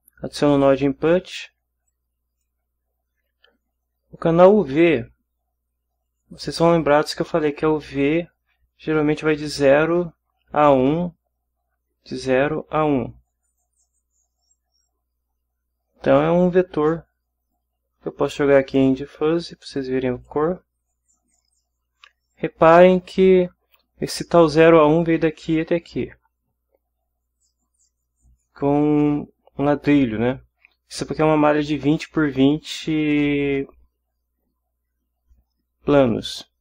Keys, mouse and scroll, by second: 0.5 click, 1.9-2.6 drag, 17.5-20.5 drag.